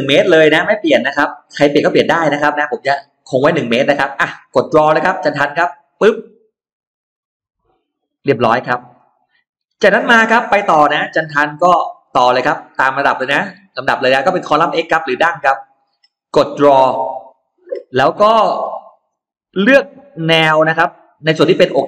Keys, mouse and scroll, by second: 0.6 click, 5.7 click, 8.0 middle click, 8.8-9.1 scroll down 1, 9.3-9.8 scroll up 1, 9.6 middle click, 11.0 click, 15.3 click, 16.9 click, 18.6 click, 19.1 middle click, 19.5 scroll down 1, 20.3 scroll down 1.